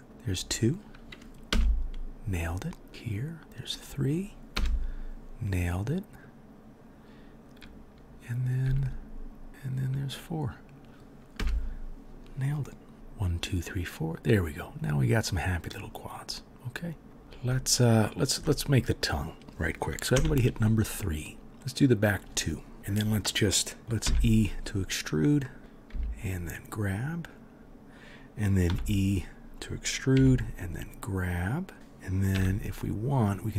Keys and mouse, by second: 0.0 k, 2.8 middle click, 2.8 right click, 2.9 k, 8.6 k, 12.9 3, 16.9 middle click, 16.9 right click, 20.1 3, 21.2 middle click, 21.2 right click, 22.7 KP_3, 23.8 KP_3, 24.0 e, 25.9 g, 28.6 e, 30.1 g, 32.3 1, 33.0 middle click, 33.0 right click.